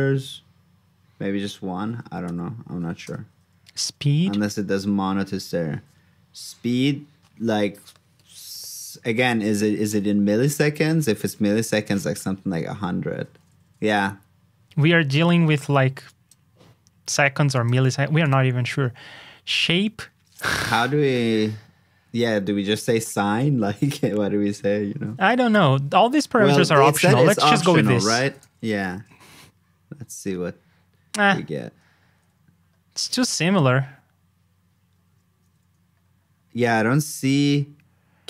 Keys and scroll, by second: 25.5 ctrl+k, 28.2 super+c, 28.4 super+j.